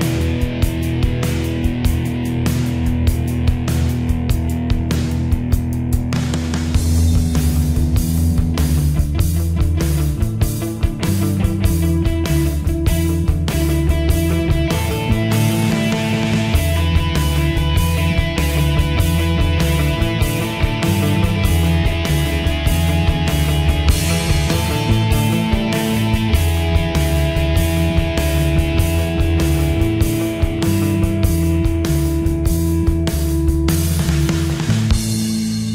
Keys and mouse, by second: 2.8 middle click, 13.2 middle click, 17.9 click, 20.1 click.